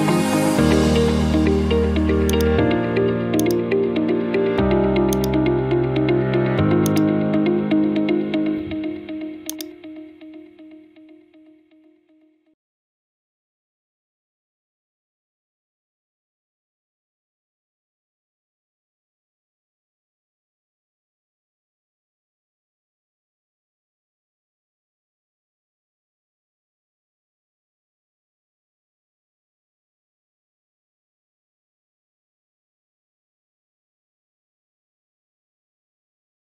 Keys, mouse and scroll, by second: 2.4 click, 4.5 click, 5.3-6.4 drag, 6.9-8.1 drag, 9.7-10.8 drag, 10.8-12.7 typing, 14.1-15.3 drag, 15.9-17.0 drag, 18.1-19.2 drag, 25.8 middle click, 26.7 scroll, 26.7 right click, 29.1 click, 30.4 click, 31.2 right click, 32.4 click, 34.2 right click, 35.4 click, 36.1 click.